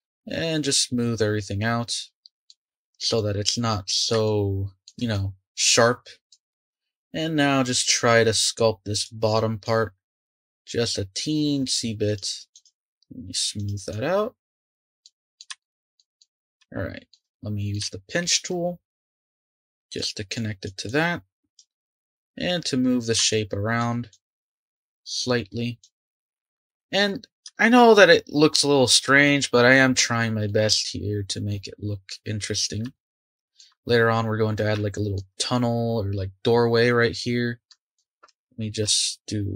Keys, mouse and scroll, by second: 2.3 click, 2.5-5.1 middle drag, 5.1-6.4 drag, 6.4-8.4 scroll up 3, 8.4-8.7 scroll up 1, 8.9-15.0 drag, 15.0-16.3 middle drag, 16.3 scroll up 1, 16.6-19.2 shift+middle drag, 19.2-21.7 drag, 21.7-24.1 middle drag, 24.1-26.2 drag, 26.2 Tab, 27.1-27.5 scroll up 1, 27.5-37.9 shift+middle drag, 37.9 click, 38.3 Tab, 38.8 Tab.